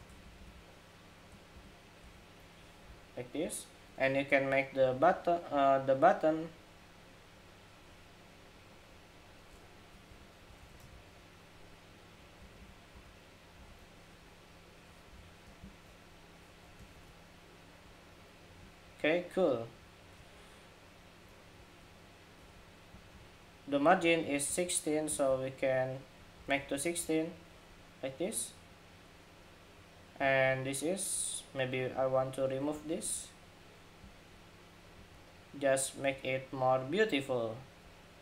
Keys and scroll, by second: 10.3 super+d, 16.6 super+g, 26.1 alt+Left, 26.4 alt+Left, 28.0 alt+Left.